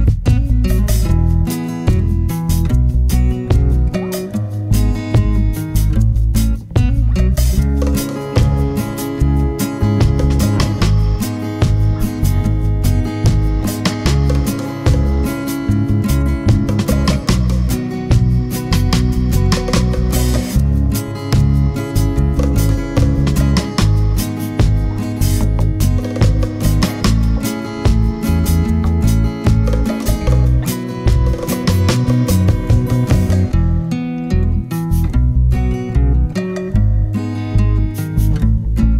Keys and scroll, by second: 0.0 super+c, 0.3 super+v, 6.3 super+d, 11.4 super+d, 11.8 super+d, 12.2 super+d.